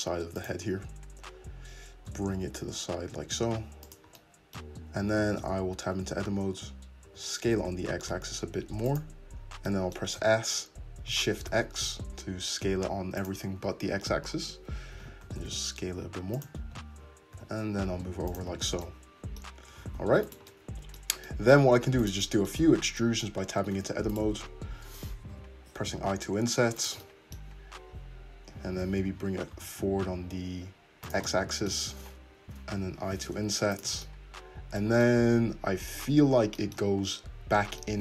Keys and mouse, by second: 0.7 `, 2.1 g, 5.3 Tab, 7.1 s, 10.1-16.6 drag, 10.2 s, 13.6 `, 14.9 s, 16.6 Tab, 17.3 g, 19.9 alt+z, 20.3 click, 21.4-24.1 middle drag, 22.7 Tab, 23.7 3, 24.1 click, 24.2-26.8 middle drag, 25.3 i, 26.8-33.7 drag, 28.8 g, 32.8 i, 33.7-38.0 shift+middle drag.